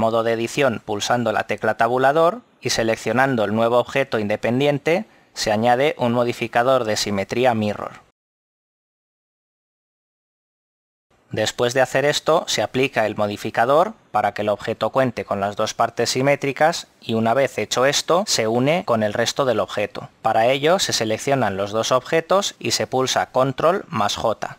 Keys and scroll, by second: 0.0 Tab, 1.3 g, 3.2 Escape, 5.9 alt+z, 24.4 ctrl+j.